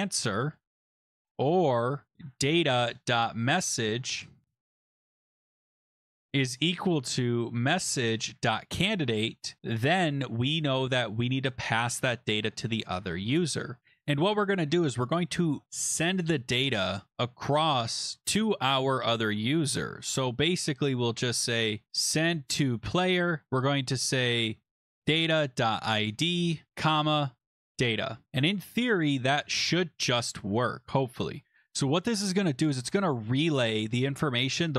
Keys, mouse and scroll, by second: 0.0-0.3 typing, 1.5-9.9 typing, 9.7 Return, 9.9 Tab, 11.7 typing, 12.0 click, 21.9-22.8 typing, 24.5-28.0 typing, 28.3 ctrl+Escape, 29.4 ctrl+s, 33.8 click.